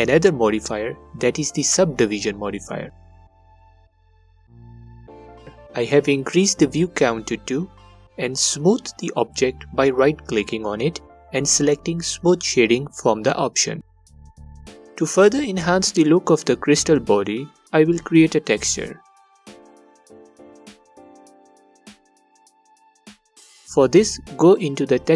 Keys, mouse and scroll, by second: 2.7 click, 4.7-9.8 drag, 11.1-14.0 right drag, 14.0 click, 14.5 click, 14.9-19.9 right drag, 19.9 click, 21.1-24.9 alt+drag.